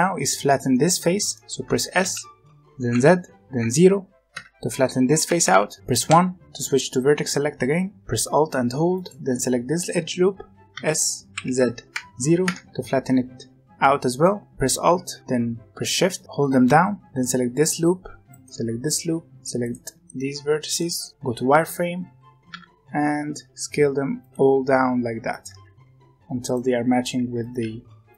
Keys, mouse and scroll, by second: 1.9 s, 5.2 g, 6.0 1, 8.9 alt+click, 10.7 s, 14.1 middle click, 17.0 alt+shift+click, 18.3 alt+shift+click, 19.2 alt+shift+click, 19.3 middle click, 19.6 alt+shift+click, 20.0-21.0 middle drag, 21.0-22.5 scroll up 1, 22.5 s, 24.4 g, 25.5 s, 26.6 g, 27.1 s, 27.5 g.